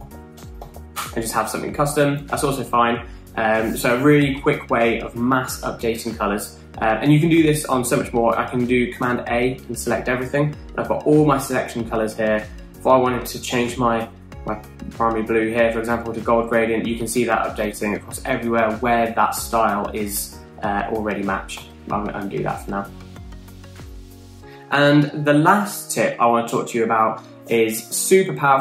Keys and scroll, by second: 0.1-1.9 typing, 9.4 super+a, 22.0 super+z.